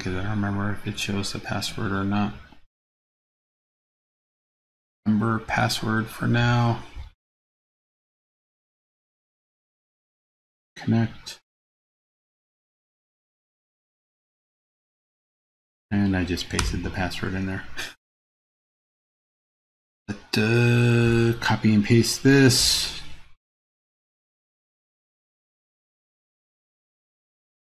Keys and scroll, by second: 14.7 super+v, 22.4 super+c, 23.3 super+c, 24.3 super+v.